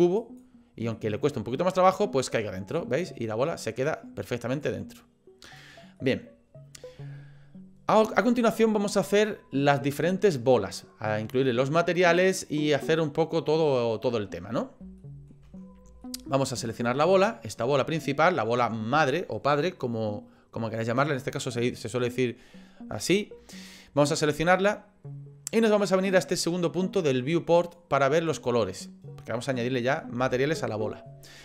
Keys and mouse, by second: 0.3 click, 1.0-2.0 middle drag, 3.0 middle click, 5.5 click, 6.0 middle click, 15.0 shift+middle click, 16.2 shift+middle click, 16.9 click, 17.3-18.4 middle drag, 28.1 click.